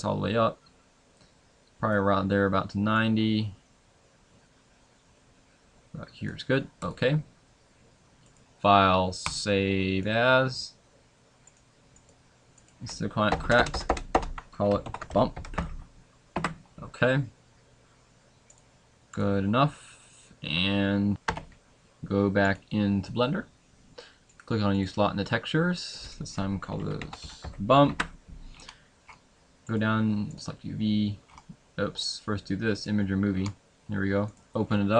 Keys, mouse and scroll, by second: 24.9 click, 32.9 click, 32.9-34.0 scroll up 3.